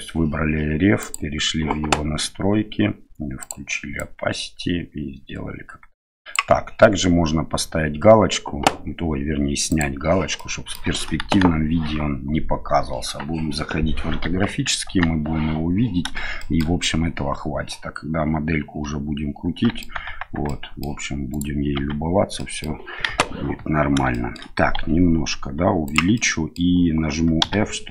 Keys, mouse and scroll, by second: 3.4 click, 4.0-6.3 drag, 9.7 click, 10.3 middle click, 11.2 KP_1, 14.2 KP_3, 14.8 KP_1, 16.3 shift+middle drag, 16.8-19.8 middle drag, 19.9 Tab, 20.4-20.8 middle drag, 21.3 right click, 21.7 Tab, 22.3 middle click, 23.0 KP_1, 24.1 shift+middle click, 24.7 s, 26.2 middle click, 27.4 f.